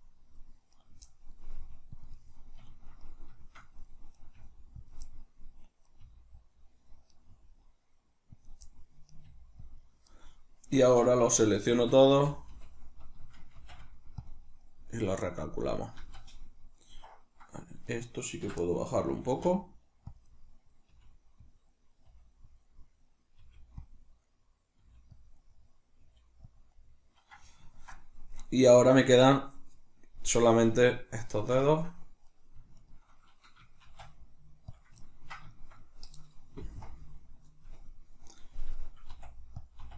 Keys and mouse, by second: 0.7 right click, 1.5 middle click, 1.5 g, 2.1 click, 2.1-4.2 middle drag, 4.2 right click, 4.3 g, 4.9 click, 5.9 right click, 6.0 g, 6.5 click, 7.1 right click, 7.3 g, 8.5 click, 9.1 right click, 9.3 g, 9.8 click, 10.1 middle click, 10.8 right click, 11.4 l, 13.6 shift+n, 14.6-17.9 middle drag, 16.0 z, 17.9 right click, 18.5 l, 18.6-20.2 middle drag, 19.3 g, 20.2 click, 20.3-21.6 middle drag, 20.9 g, 21.6 click, 22.1 middle click, 22.1 g, 22.6 click, 22.7 middle click, 23.4 g, 23.8 middle click, 23.9 click, 24.8 middle click, 24.8 g, 25.3 click, 26.0 middle click, 26.0 g, 26.6 click, 27.7 ctrl+middle click, 28.0 middle click, 28.6 right click, 31.3 shift+middle click, 32.2 right click, 32.8 shift+right click, 33.8 shift+d, 34.8 click, 35.0-39.7 ctrl+middle drag, 39.1 r, 39.7 click, 39.8 r.